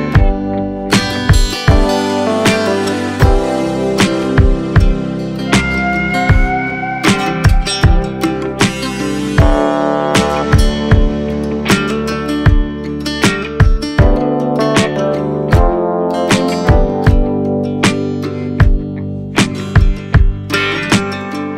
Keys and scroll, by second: 15.3 ], 17.3 x, 17.6 z, 18.3 b, 20.1 [.